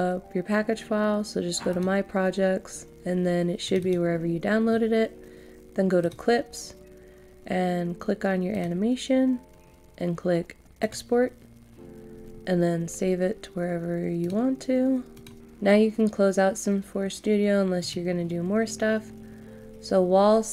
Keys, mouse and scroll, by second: 12.2-12.9 scroll down 1, 12.9-13.9 scroll up 1, 14.2-20.5 drag.